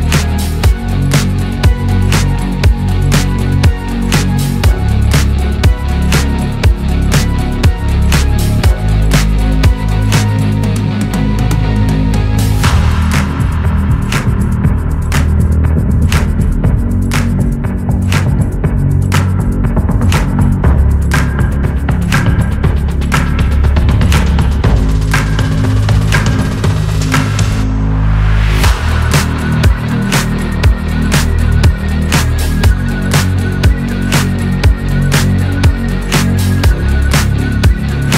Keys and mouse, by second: 15.5 click, 26.3-31.5 drag, 38.0 click.